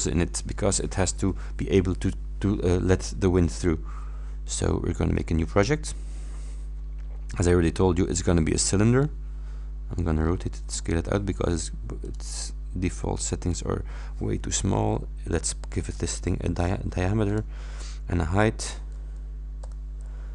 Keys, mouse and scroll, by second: 5.2 click, 7.4 click, 8.9 middle click, 9.0-10.2 drag, 10.2-10.6 scroll down 1, 10.8 scroll down 2, 12.1 middle click, 13.6 middle click, 17.3 click, 19.6 shift+9.